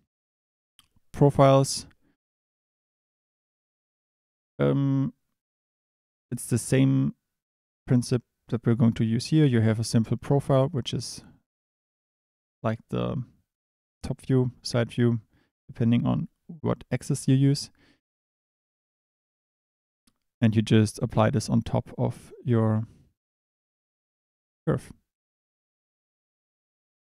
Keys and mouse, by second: 25.1 click, 26.9 shift+a.